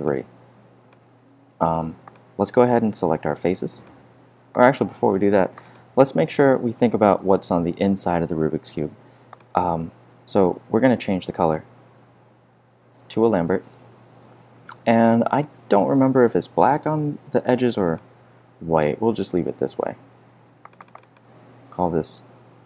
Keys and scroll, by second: 22.5-22.6 typing.